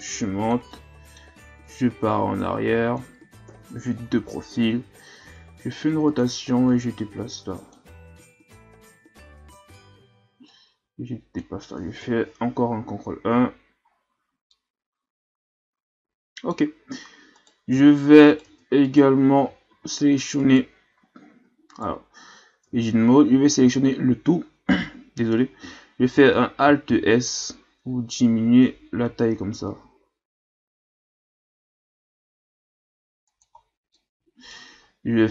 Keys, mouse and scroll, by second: 0.0 click, 0.7 middle click, 1.6-3.5 drag, 3.5 KP_3, 4.3-5.2 ctrl+scroll up 3, 5.2 r, 6.7-8.3 drag, 10.0 ctrl+z, 10.5-12.0 drag, 12.0 ctrl+KP_1, 12.8-13.2 scroll up 4, 13.2 Tab, 13.9-14.5 scroll down 2, 14.5-16.6 middle drag, 16.6-17.4 scroll up 5, 17.4 right click, 17.8 Tab, 18.3 right click, 18.5 Tab, 18.8 right click, 19.4 a, 19.7 a, 20.4 right click, 20.9 Tab, 21.3 Tab, 21.7 right click, 22.6 Tab, 23.3 a, 23.6 a, 26.9 alt+s, 33.6-33.9 scroll down 1, 33.9 middle click, 34.8-35.3 scroll up 2.